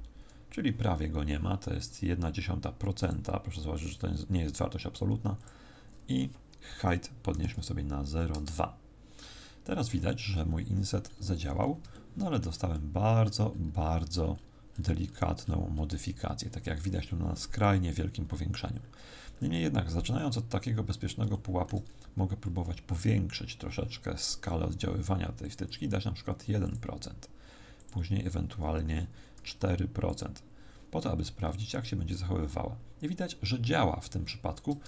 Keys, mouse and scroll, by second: 3.0 click, 5.4 click, 10.6-11.9 scroll up 10, 11.9 shift+middle click, 11.9 scroll up 1, 12.7 middle click, 13.9-16.2 scroll up 26, 16.2-17.8 scroll up 4, 17.8 scroll up 2, 17.9-21.3 scroll down 41, 21.3 shift+middle click, 21.8-22.6 scroll up 3, 25.4 click, 27.7 click, 31.3-33.0 scroll up 1, 33.0-33.4 scroll up 4.